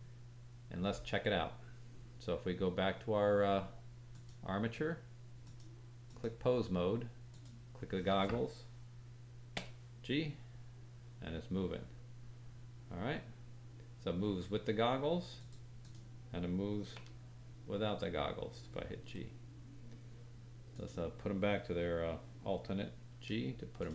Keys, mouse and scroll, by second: 5.4-7.4 drag, 9.5 g, 15.8 click, 16.9 g, 20.7 click, 23.1 alt+g, 23.7 click.